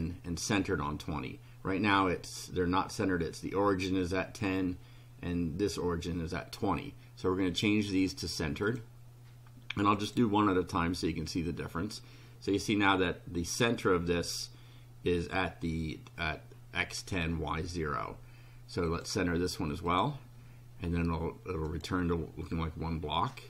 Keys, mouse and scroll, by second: 7.5 click, 8.7 click, 10.0 click, 18.9 click, 19.9 click, 21.7 click.